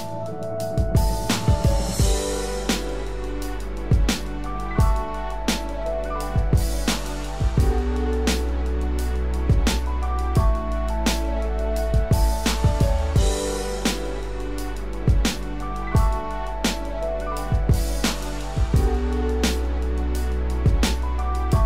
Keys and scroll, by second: 17.0 ctrl+-.